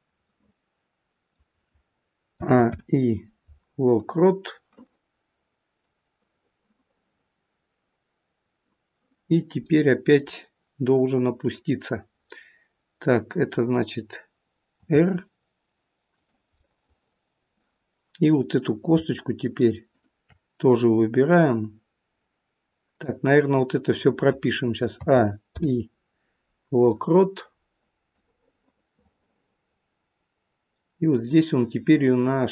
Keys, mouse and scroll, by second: 4.4 click, 27.2 click.